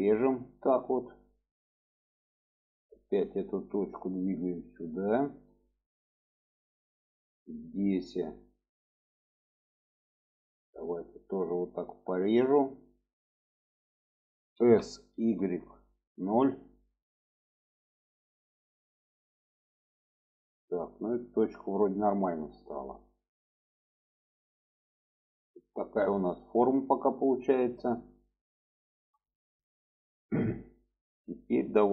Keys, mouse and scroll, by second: 0.7 click, 2.1 click, 3.2 click, 4.0 click, 5.2 shift+middle click, 6.3 shift+middle click, 7.9 shift+middle click, 9.9 click, 10.6 click, 12.1 click, 14.5 s, 18.9 click, 20.2 shift+middle click, 20.9 shift+middle click, 22.3 shift+middle click, 23.3-27.4 middle drag, 28.1 middle click, 29.2 shift+middle click, 29.9 shift+middle click, 30.7 shift+middle click, 31.4 shift+middle click.